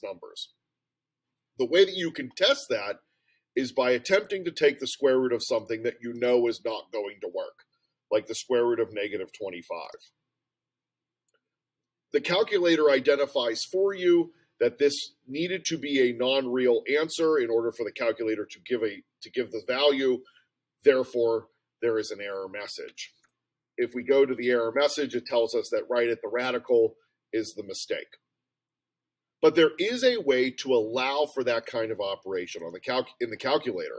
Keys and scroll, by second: 6.2 2, 6.5 5, 9.9 Return, 22.9 Down, 24.1 Return.